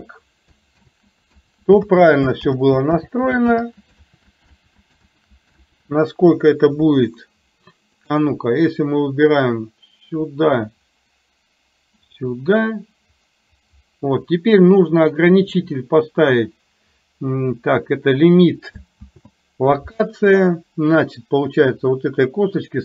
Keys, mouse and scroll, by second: 1.0 ctrl+z, 2.0 ctrl+z, 2.6 ctrl+z, 3.6 ctrl+z, 4.1 ctrl+z, 4.7 ctrl+z, 5.2 ctrl+z, 8.1 click, 9.7-15.7 drag.